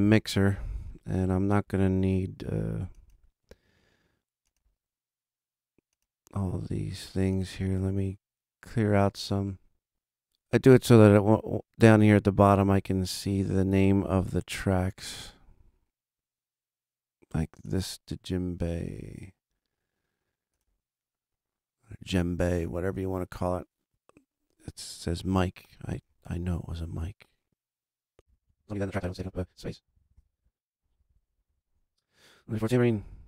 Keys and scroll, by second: 25.7 Delete, 28.4 super+Left, 28.5 Right, 28.9 Down, 29.1 Left, 29.3 Delete, 29.7 super+Down, 29.8 super+Right, 29.8 Left, 30.1 Delete, 30.7 super+Down, 30.9 super+Right, 31.0 Left, 31.4 BackSpace, 31.6 Return.